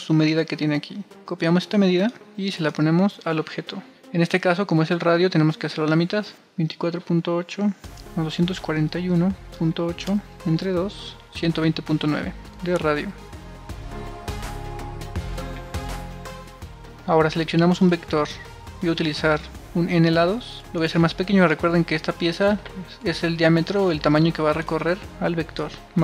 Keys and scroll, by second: 1.7 super+c, 1.8 super+c, 3.7 super+v, 8.6 super+space, 9.0-14.7 typing, 24.5 1, 24.9 1, 24.9 1.